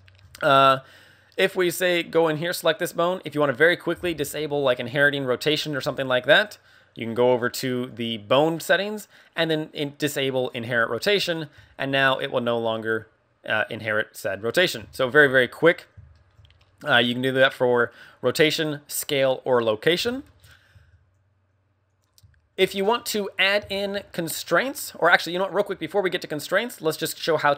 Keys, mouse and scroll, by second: 1.5 right click, 7.8 click, 10.2 click, 11.2 right click, 11.5 r, 14.5 right click, 14.9 shift+middle click, 16.9 right click, 18.6 click, 20.2 shift+middle click, 20.5 scroll up 2, 21.8 click, 22.9-23.3 scroll down 1, 23.7 shift+middle click, 24.3 scroll down 2, 27.2 middle click.